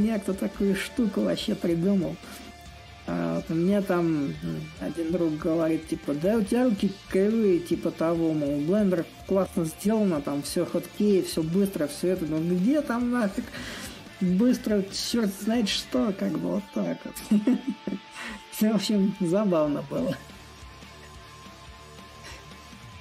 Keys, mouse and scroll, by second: 0.9-5.9 drag, 6.8-11.8 drag, 12.5-17.5 drag, 18.0-23.0 drag.